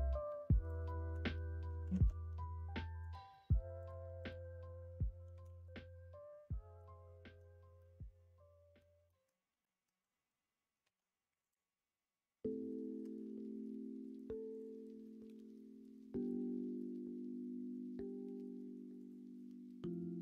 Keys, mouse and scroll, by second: 0.8 middle click, 1.9 ctrl+z, 3.0-6.3 drag, 6.7 middle click, 7.7-8.7 middle drag, 9.0 middle click, 9.5 shift+middle click, 10.8 1, 11.4-13.0 drag, 13.0 g, 15.0 middle click, 15.5-18.6 shift+middle drag, 19.0 click, 19.3 middle click.